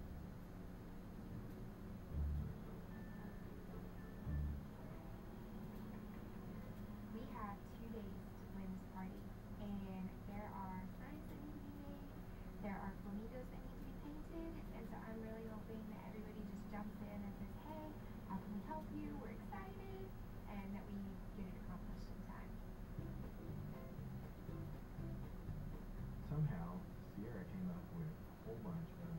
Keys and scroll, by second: 0.3 [, 2.7 [, 3.3 [, 4.3 [, 5.1 [, 6.5 ], 7.3 ].